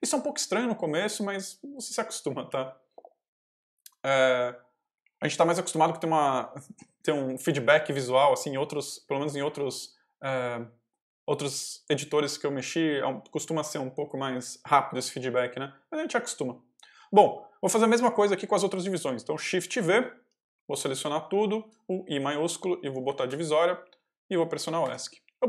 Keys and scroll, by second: 2.3 k, 3.2 w, 4.7 h, 19.5 ctrl+v, 20.5 j, 21.6 shift+j, 22.0 shift+i, 22.9 shift+\, 24.7 Escape.